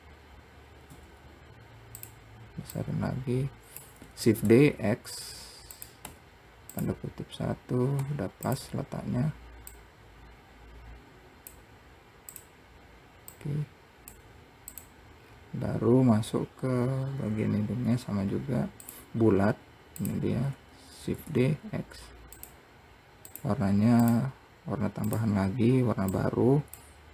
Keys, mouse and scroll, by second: 1.2 s, 3.0 click, 4.6 shift+d, 10.1 click, 12.6 click, 13.7 click, 15.0 click, 15.5-16.2 scroll down 2, 16.2-17.4 scroll up 1, 18.6 scroll down 1, 19.2 click, 20.3 click, 21.3 shift+d, 23.6-25.5 drag.